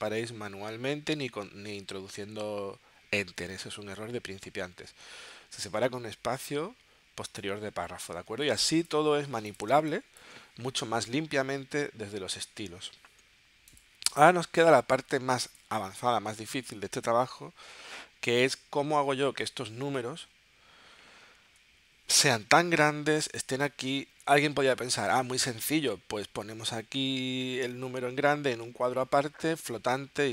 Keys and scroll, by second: 8.3 space, 9.7 space, 14.8 space, 16.1 space, 21.5 super+Tab.